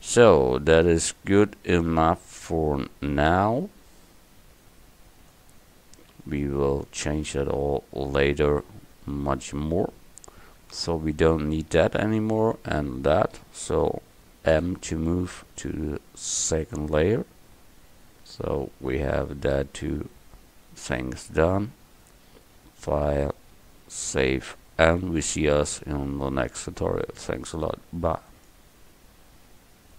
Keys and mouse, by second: 6.2 KP_1, 11.4-14.6 right drag, 14.6 m, 23.2-28.5 drag.